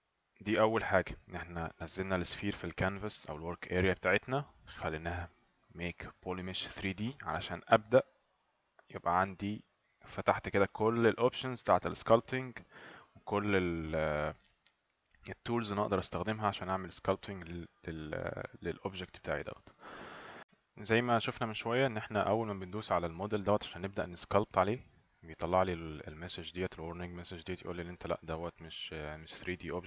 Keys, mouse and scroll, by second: 24.7 click.